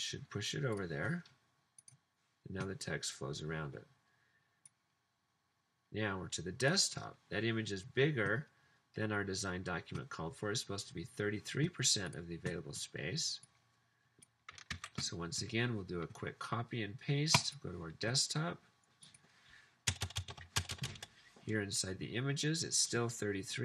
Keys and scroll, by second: 14.7 super+c, 19.9 Return, 20.1 Return, 20.2 Return, 20.4 super+v, 20.7 Return, 20.9 Return.